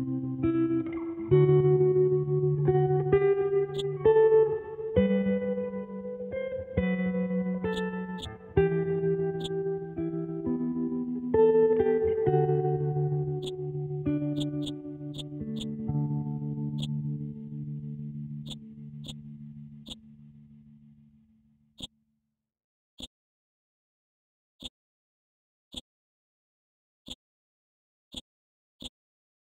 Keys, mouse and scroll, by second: 3.7 shift+click, 7.7 click, 9.4-12.1 shift+drag, 12.1-13.0 scroll down 1, 13.4 click, 18.4 click, 20.2-20.9 scroll down 1, 21.8 click, 22.5 scroll up 1, 23.0-24.6 drag, 24.6-28.1 drag.